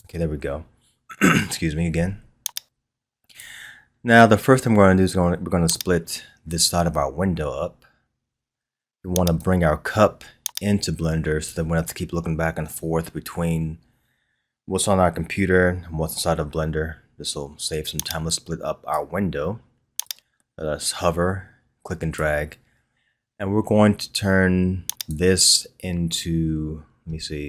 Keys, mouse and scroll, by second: 0.0-27.4 drag.